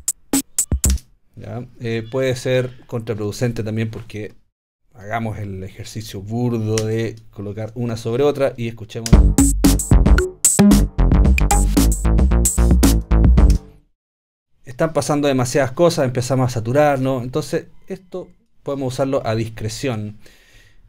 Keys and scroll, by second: 0.9 space, 9.1 space, 13.5 space.